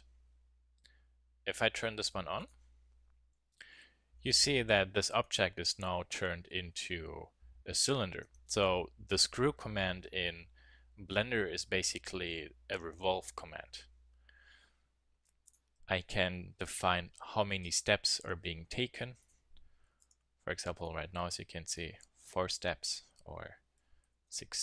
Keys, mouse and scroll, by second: 3.7 KP_1, 4.1 z, 5.2-5.6 middle drag, 5.7 z, 8.2 Tab, 15.4-17.2 drag, 17.2-18.4 middle drag, 19.2-21.0 drag, 21.0 middle click, 22.8-24.6 drag.